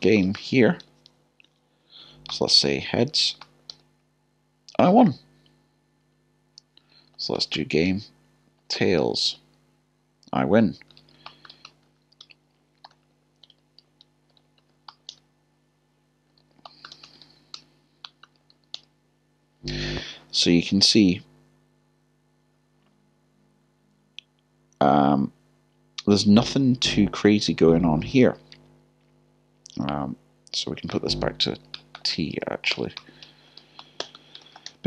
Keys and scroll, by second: 2.3 typing, 5.5 typing, 6.1 Up, 6.9 Down, 8.6 typing, 11.0 typing, 12.2 typing, 12.8 Return, 16.4 typing, 18.0 typing, 32.7 typing.